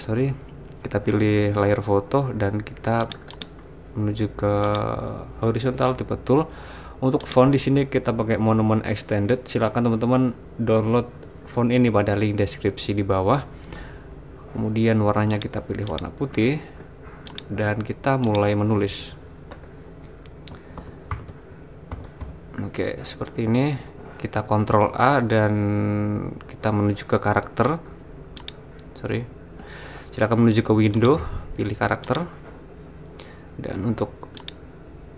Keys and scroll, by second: 20.3-22.7 typing, 24.9 super+a.